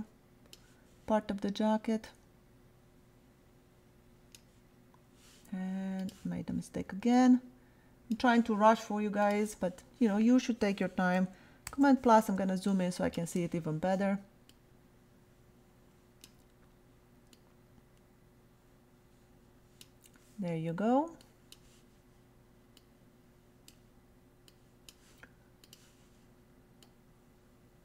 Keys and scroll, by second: 11.7 super+=, 12.3 super+space.